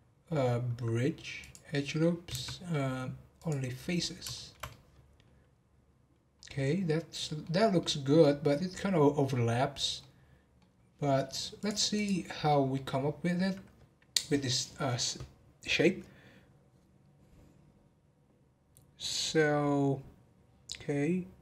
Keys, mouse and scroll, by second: 2.1 right click, 4.0 scroll down 1, 4.3-7.7 shift+middle drag, 7.7-9.7 middle drag, 9.7-10.0 scroll up 1, 10.0-10.7 middle drag, 10.7-11.5 scroll down 1, 11.5-12.5 drag, 12.5-15.6 middle drag.